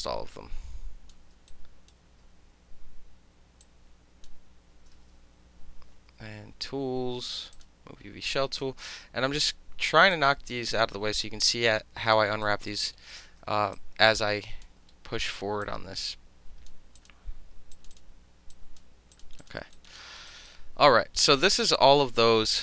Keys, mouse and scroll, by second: 0.0-1.1 alt+drag, 1.1 alt+middle click, 1.5 alt+right click, 3.6-4.2 drag, 5.4 w, 7.5 click, 8.6 click, 10.1-12.1 drag, 12.4 alt+right click, 12.5-12.9 alt+middle drag, 13.1-13.7 alt+middle drag, 13.7-14.6 alt+drag, 14.6 alt+middle drag, 15.2-15.6 alt+middle drag, 15.6-16.7 drag, 16.7-17.0 middle drag, 17.0 click, 17.1-17.7 middle drag, 17.7 click, 17.9-18.5 middle drag, 18.5 click, 18.8-19.1 middle drag, 19.1 click, 19.2 middle drag, 19.4 click, 19.5 alt+middle drag, 19.7 alt+click, 19.9 alt+middle click, 20.2 alt+middle click, 20.3 alt+click, 20.5 alt+middle click, 22.2 middle click.